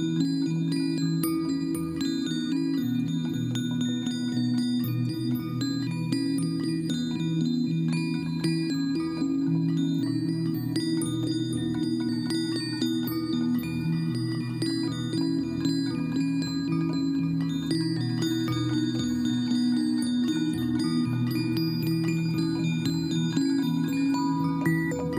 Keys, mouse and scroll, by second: 24.1 right click.